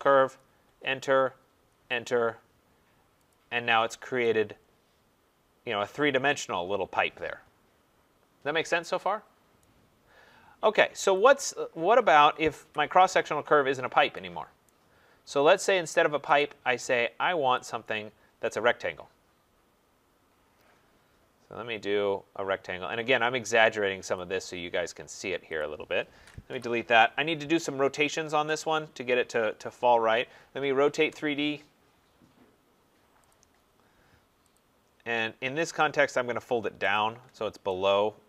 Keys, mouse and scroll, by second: 0.6 Return, 1.7 Return, 3.3 click, 3.8 middle click, 3.9 middle click, 3.9 scroll, 9.6 right click, 10.3 scroll, 10.3 scroll up 5, 11.2 click, 12.6 Delete, 14.7 right click, 16.4 click, 17.7 click, 20.5-21.4 scroll, 24.1 click, 24.5 scroll, 25.6 click, 26.5 Delete, 28.5 click, 30.2-31.0 typing, 33.3 click, 33.5 middle click, 33.7 middle click, 34.5 click, 35.9 click.